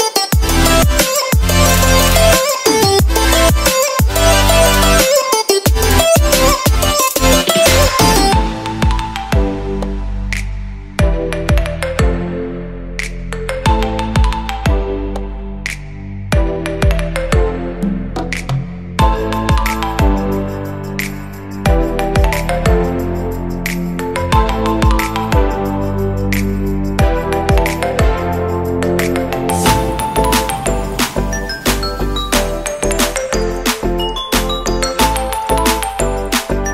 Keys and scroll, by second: 1.6 ctrl+z, 6.5 ctrl+z, 12.3 space, 13.6 ctrl+z, 14.1 space, 14.6 ctrl+z, 15.3 ctrl+z, 17.3 space, 20.3 space, 23.0 space, 23.5 space, 24.4 space, 26.8 space, 32.8 ctrl+z, 33.8 ctrl+z.